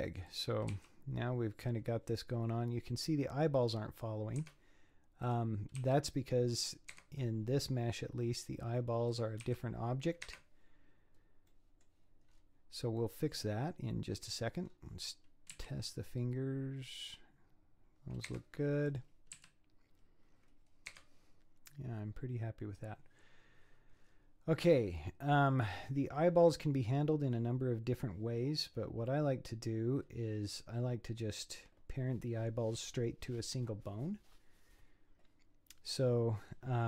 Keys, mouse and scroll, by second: 0.3 click, 0.7 r, 5.3 click, 5.8 r, 7.5-8.3 scroll down 9, 8.7 scroll up 4, 9.1 click, 9.5 r, 11.5 middle click, 12.3-13.0 scroll up 7, 13.0 scroll down 1, 13.0-14.3 middle drag, 14.3 click, 14.7-15.1 scroll down 5, 15.1-15.6 scroll up 4, 15.6 s, 18.9 click, 19.4 s, 23.1 scroll down 7, 24.0-25.0 scroll up 11, 25.0 middle click, 25.8-26.4 scroll down 6, 26.4-29.1 scroll up 7, 29.1 middle click, 30.0-30.7 scroll down 6, 30.7 scroll up 7.